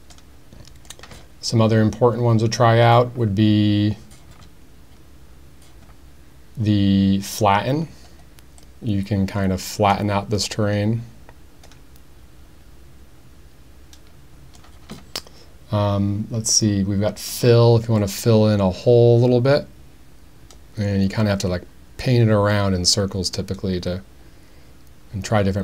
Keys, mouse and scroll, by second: 7.4 click, 8.6-14.6 drag, 18.0-25.6 drag.